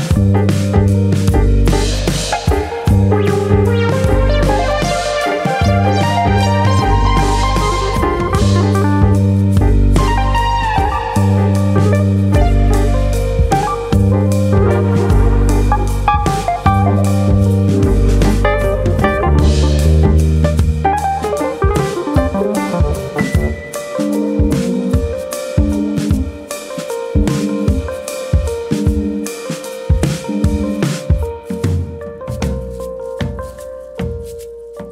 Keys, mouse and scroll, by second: 0.1 click, 1.9 middle click, 2.4 shift+middle click, 3.0-3.4 scroll up 1, 3.4 shift+middle click, 3.8 ctrl+z, 4.4 middle click, 5.2 click, 6.4 ctrl+KP_Subtract, 7.6 click, 8.8 middle click, 9.7 KP_1, 10.3-10.7 scroll down 1, 10.7 shift+middle click, 11.6 click, 12.5 click, 13.6 shift+middle click, 14.1-15.0 scroll down 1, 15.0 scroll down 1, 15.5 click, 15.9 scroll down 1, 16.2 shift+middle click, 16.4-16.7 scroll up 5, 17.0 middle click, 18.3 click, 19.2 g, 20.6 click, 20.8 middle click, 23.4 click, 23.9 g, 27.3 click, 27.8 click, 28.2 g, 29.0 click, 29.5 click, 29.8 g, 30.5 click, 30.7-31.8 scroll down 3, 31.2 middle click, 31.8 middle click, 32.3 Tab, 32.6 scroll down 2, 32.8 middle click, 33.3-34.3 scroll down 2, 33.6 shift+middle click, 34.3 shift+middle click.